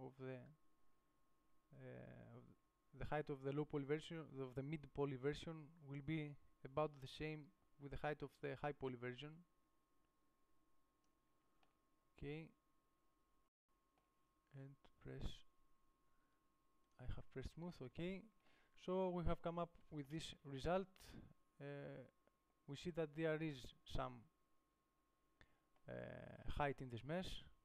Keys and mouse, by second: 7.4-10.5 drag, 11.7 Tab, 17.8 click, 20.6 KP_5.